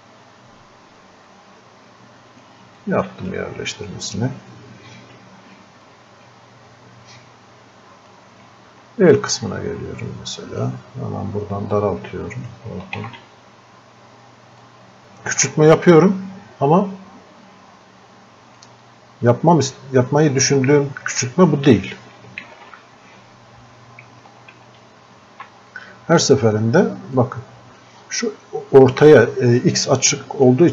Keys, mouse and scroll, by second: 1.6 click, 3.1 shift+click, 6.2-8.4 drag, 9.4 ctrl+click, 13.0 ctrl+z, 15.0 shift+click, 15.8-18.9 drag, 22.5 ctrl+z, 24.5 ctrl+z, 25.7-30.7 drag.